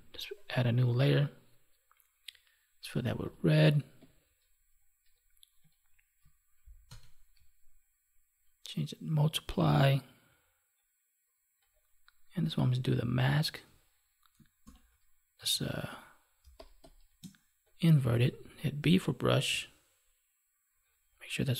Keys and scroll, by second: 6.8 alt+BackSpace, 14.6 ctrl+i, 16.3 space.